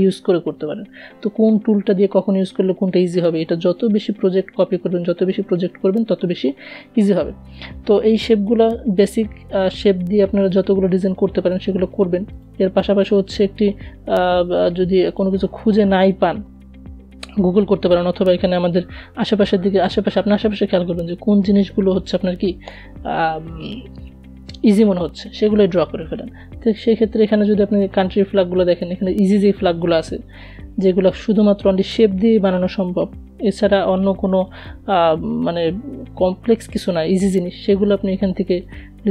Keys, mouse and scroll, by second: 8.1 click, 10.5 click, 13.4 click, 19.4-20.5 typing, 21.0 Return.